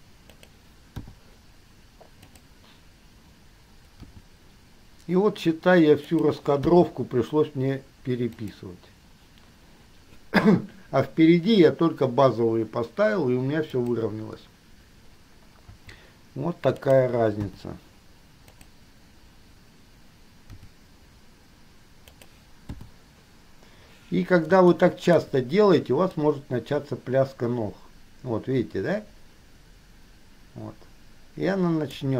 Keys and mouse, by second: 1.1 i, 2.5 click, 4.3 g, 6.9 i, 8.6 click, 13.9 click, 15.9 g, 17.6 i, 18.6 click, 20.8 g, 22.9 i, 24.9-25.4 shift+middle drag, 27.5-28.1 middle drag.